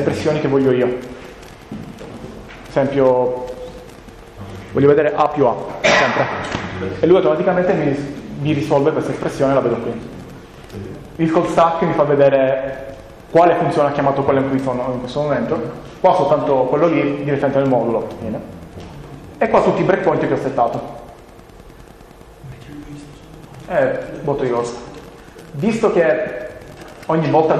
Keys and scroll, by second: 5.0 a, 5.8 Return.